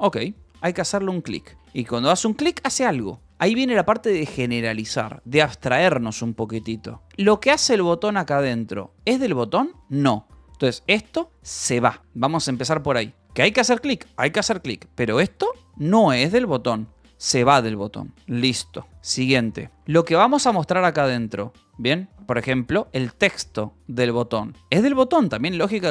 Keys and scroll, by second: 0.6-2.3 typing, 7.0 e, 10.0 h, 11.2 Escape, 12.0 e, 13.1 v, 13.7 e, 15.7 h, 16.1 c, 16.5 Escape, 16.9 j, 18.3 k, 20.3 shift+v, 22.1 Escape, 24.5 shift+v.